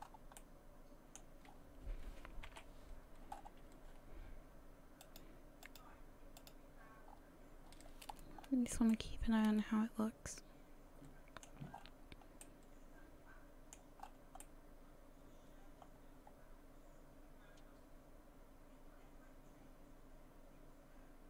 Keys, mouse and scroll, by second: 0.0-0.4 scroll up 2, 0.4 middle click, 1.5 scroll down 4, 2.5 KP_1, 3.3-4.6 scroll up 6, 5.0 click, 5.7 click, 6.4 click, 7.1-8.4 scroll down 8, 8.9 middle click, 11.7-12.4 scroll up 4, 12.4 middle click, 14.0-14.4 scroll up 2, 14.4 middle click.